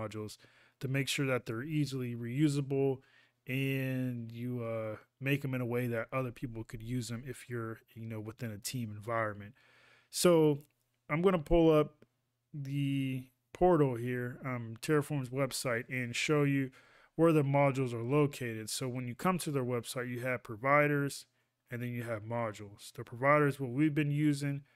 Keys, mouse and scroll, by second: 13.5 ctrl+a.